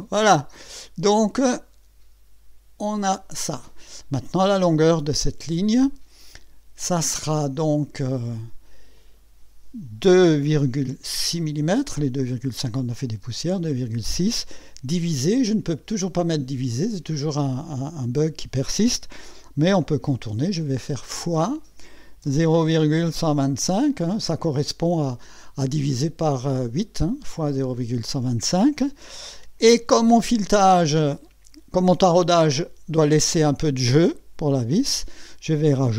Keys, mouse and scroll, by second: 1.4-3.2 drag, 5.5 click, 8.3 click, 10.1 KP_2, 10.5 KP_Decimal, 11.4 KP_6, 15.8 KP_Divide, 21.2 KP_Multiply, 22.2-23.6 typing.